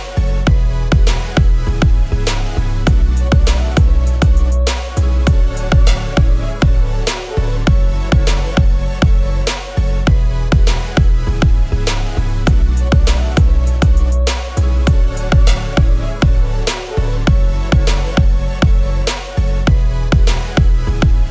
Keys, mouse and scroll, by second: 0.1 alt+Up, 0.4 alt+Up, 0.5 alt+Up, 1.5 double click, 3.9-4.8 typing, 6.9-8.5 typing, 9.7-10.5 typing, 11.8-12.6 typing, 12.6 ctrl+shift+., 12.7 ctrl+shift+., 12.9 ctrl+shift+., 13.3 ctrl+shift+., 14.2 ctrl+a, 14.7 alt+Down, 14.9 alt+Down, 15.0 alt+Down, 15.2 alt+Down.